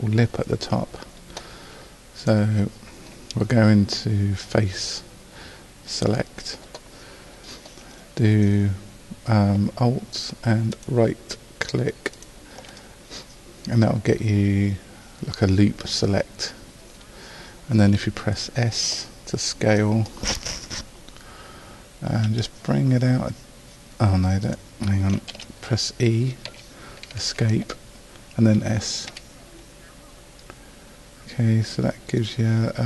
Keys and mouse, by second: 2.2-11.3 drag, 11.3-16.0 right drag, 22.3 s, 25.3 ctrl+z, 26.5 e, 29.1 s.